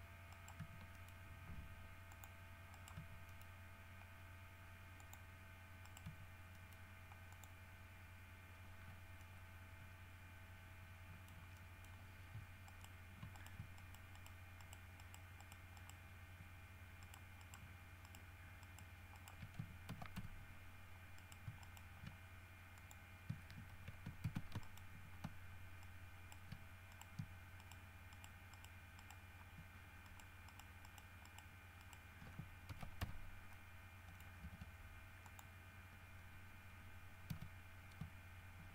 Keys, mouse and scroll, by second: 0.5 right click, 0.8 g, 1.1 middle click, 2.3 click, 2.9 right click, 3.2 g, 3.5 middle click, 5.2 click, 6.1 right click, 6.3 g, 6.7 middle click, 7.5 click, 9.0 scroll down 1, 9.4-11.7 middle drag, 11.8 middle click, 12.9 shift+right click, 13.5 shift+middle click, 14.0 shift+middle click, 14.8 shift+middle click, 15.2 shift+right click, 16.0 shift+right click, 17.2 shift+right click, 17.6 shift+right click, 18.3 shift+right click, 18.8 shift+right click, 19.3 shift+middle click, 20.1 ctrl+shift+f, 20.4 ctrl+g, 21.4 shift+middle click, 21.8 shift+middle click, 23.0 click, 24.5 alt+shift+a, 24.9 alt+shift+middle click, 26.0 shift+right click, 27.1 shift+right click, 27.8 shift+right click, 28.3 shift+right click, 28.7 shift+right click, 29.2 shift+right click, 30.3 shift+right click, 30.7 shift+right click, 31.1 shift+right click, 31.5 shift+right click, 32.0 shift+right click, 32.9 ctrl+shift+f, 33.2 ctrl+g, 33.7 ctrl+middle click, 34.4 scroll down 2, 34.6 z, 35.5 middle click, 37.5 a.